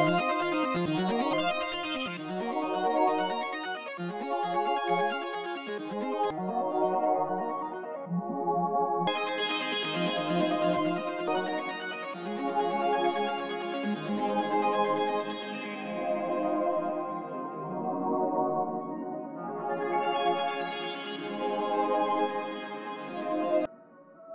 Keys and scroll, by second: 23.6 ctrl+a.